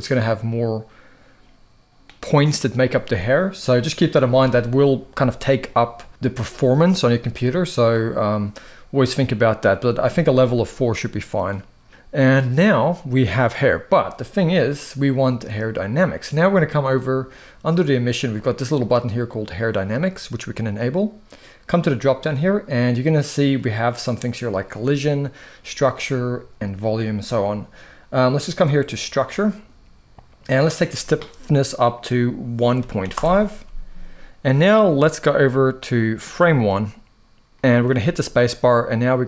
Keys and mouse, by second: 7.7-8.1 middle drag, 10.5-11.9 middle drag, 19.4 click, 21.4 click, 28.6 click, 30.5-32.9 drag, 35.5 click, 36.4 click, 37.7 space.